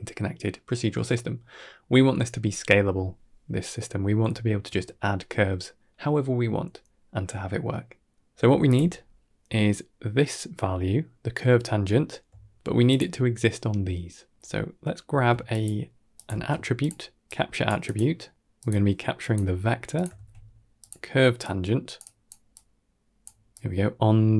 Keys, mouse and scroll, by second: 3.6-4.1 middle drag, 4.2 shift+middle click, 6.0 scroll up 4, 6.2 middle click, 6.6-8.1 middle drag, 8.5 click, 8.8-9.2 scroll down 1, 12.7 ctrl+shift+click, 14.3 shift+middle click, 15.3 shift+a, 18.5-19.2 drag, 19.8 click, 20.0 shift+d, 21.3-21.9 drag, 22.4-23.1 drag, 23.4 click.